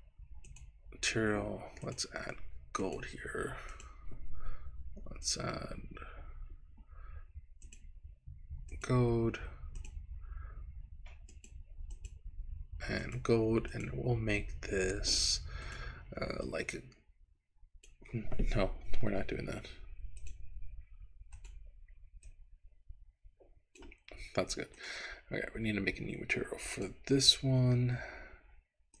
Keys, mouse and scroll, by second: 0.4 click, 2.0-3.0 drag, 3.8 click, 5.2 click, 7.6 click, 9.8 click, 11.3 click, 12.1 click, 13.8 click, 15.6 click, 21.3 click, 26.8 click, 28.9 click.